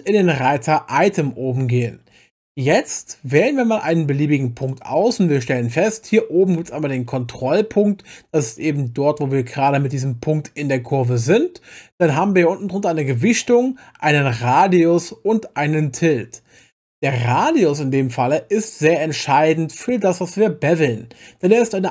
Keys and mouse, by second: 0.3 click, 4.6 click.